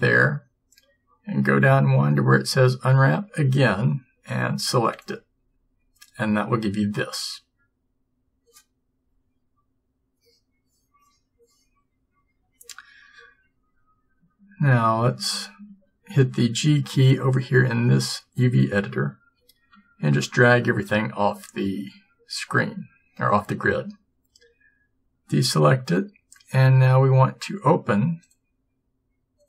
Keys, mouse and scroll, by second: 19.5 g, 24.4 a.